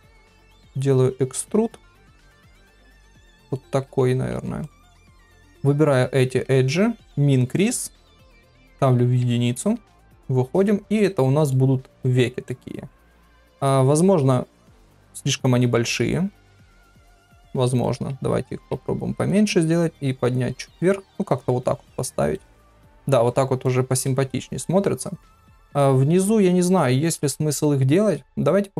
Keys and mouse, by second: 3.1 middle click, 4.3 2, 7.6 click, 9.2 Tab, 10.1 KP_Divide, 10.9 click, 11.5 middle click, 12.4 middle click, 13.6 click, 13.9 middle click, 15.9 shift+middle click, 16.8 KP_3, 17.6 shift+middle click, 19.3 g, 20.5 g, 21.6 middle click, 23.2 middle click, 24.0 middle click, 25.7 click, 27.0 KP_1.